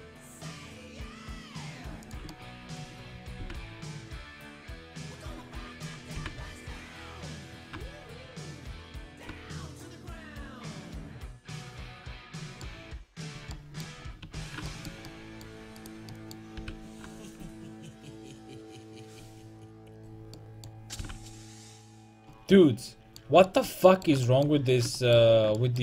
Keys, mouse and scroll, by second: 2.2 click, 2.3 right click, 2.8-5.1 drag, 3.4 g, 5.2 click, 5.6-7.2 drag, 6.2 g, 7.6 s, 12.7 middle click, 14.3 a, 15.8-17.8 drag, 16.6 g, 19.0-20.4 drag, 20.0 right click, 21.0 g, 22.0 a.